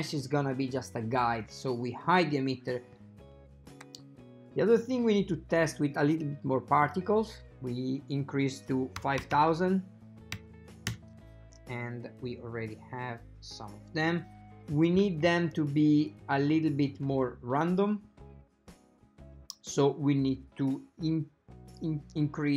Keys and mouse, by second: 1.5 click, 6.9-11.5 drag, 9.4 KP_0, 16.1 click.